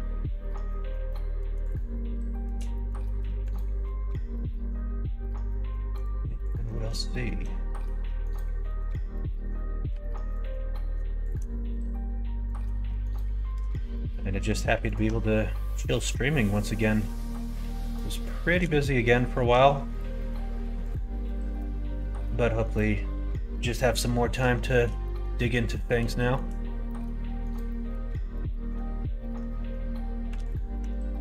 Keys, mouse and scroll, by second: 1.0 middle click, 1.7 shift+middle click, 2.7 middle click, 3.0 middle click, 3.8 ctrl+e, 6.3 middle click, 6.6 middle click, 7.1 shift+middle click, 7.7 middle click, 8.4 middle click, 9.8 2, 11.3 middle click, 12.4 click, 12.7 middle click, 13.5 f, 14.0 middle click, 14.9 alt+click, 15.5 middle click, 15.8 ctrl+f, 17.5 middle click, 18.5 shift+middle click, 18.8 middle click, 19.2 shift+middle click, 19.9 alt+click, 20.1 middle click, 20.8 alt+click, 21.9 ctrl+f, 24.0 middle click, 24.5 shift+middle click, 25.0 middle click, 25.6 middle click, 26.1 shift+middle click, 26.8 middle click, 27.6 middle click, 30.3 alt+h, 30.7 Tab.